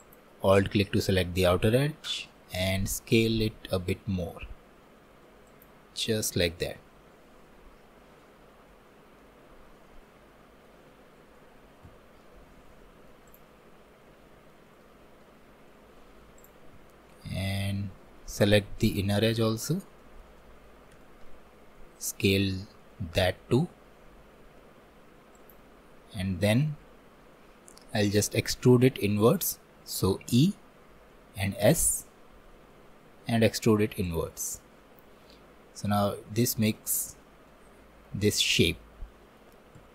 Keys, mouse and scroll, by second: 0.0-2.2 alt+drag, 2.2 s, 9.2-11.9 middle drag, 11.9 Tab, 12.2-13.3 middle drag, 13.3 click, 13.6-13.9 scroll down 1, 14.5-15.6 shift+middle drag, 15.6 scroll up 2, 16.4 click, 16.8 Tab, 17.3-20.1 middle drag, 21.1-23.3 shift+middle drag, 23.3 s, 34.6-37.2 middle drag, 37.2-37.5 scroll up 1, 37.5-39.8 middle drag, 39.8 Tab.